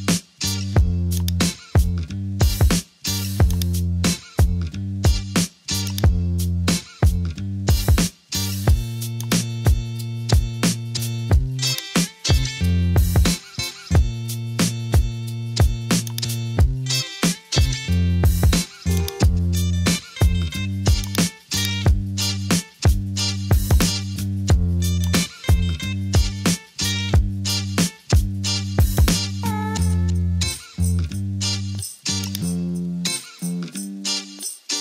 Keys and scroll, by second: 1.9 BackSpace.